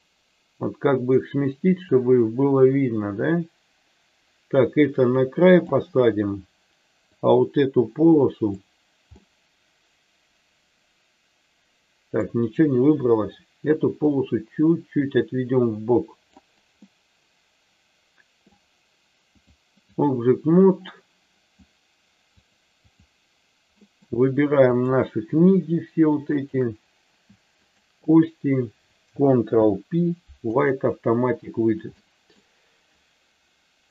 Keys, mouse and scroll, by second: 7.1-8.5 drag, 9.1-12.3 middle drag, 13.9-16.3 drag, 16.7-18.4 middle drag, 19.3 click, 20.9 middle click, 22.4 click, 23.8 middle click, 24.7 click, 26.4 shift+click, 27.6 shift+click, 29.4 ctrl+p, 31.9 middle click, 33.7 KP_3.